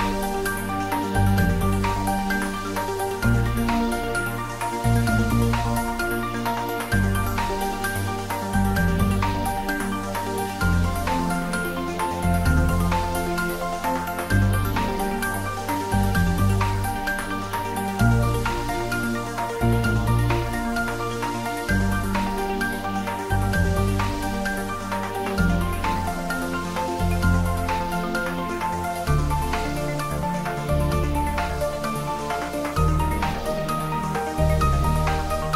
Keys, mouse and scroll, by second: 0.8 scroll down 1, 1.0 shift+z, 3.3 scroll down 1, 4.3-5.9 middle drag, 11.1 click, 12.0 scroll down 1, 12.2 middle click, 13.3 click, 16.8 click, 17.2 middle click, 17.8 scroll down 1, 19.0 shift+Num_Lock, 19.0 scroll down 1, 19.2 shift+a, 20.6-24.0 drag, 26.2 g, 30.7 click, 31.5 middle click, 31.8-32.3 g, 32.5 g, 32.6 click, 33.4 g, 34.6 click, 35.3 g, 35.4-35.5 middle drag.